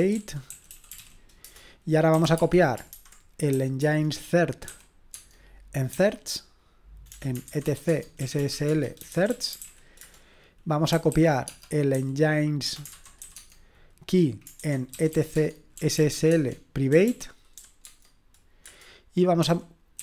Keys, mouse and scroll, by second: 1.0 ctrl+o, 1.9-18.4 typing, 11.9 Tab, 19.4-20.0 typing.